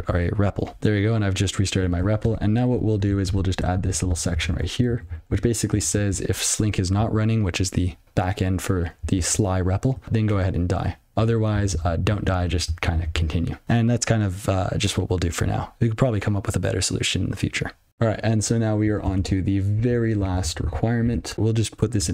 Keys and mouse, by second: 2.7 ctrl+a, 3.0 Tab, 4.4 alt+j, 6.7 ctrl+g, 7.5 ctrl+n, 10.0 ctrl+alt+space, 11.4 ctrl+p, 13.4 ctrl+n, 19.9 ctrl+alt+f, 21.3 (.